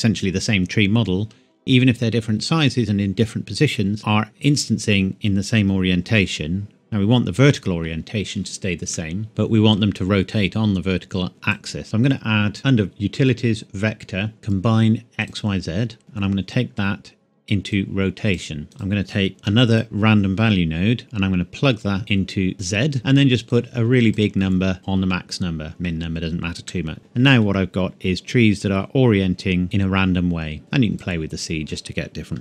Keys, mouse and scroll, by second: 8.9 shift+middle click, 9.5-10.2 scroll up 1, 11.3 click, 15.2 click, 16.7-17.7 scroll up 1, 17.7 click, 18.6 scroll down 1, 18.7 click, 19.3 shift+d, 19.7 click, 20.5-21.0 scroll up 1, 21.0 click, 23.5 click, 26.6 middle click, 27.4 scroll up 1, 28.1 scroll down 1, 29.6 middle click, 30.6 click.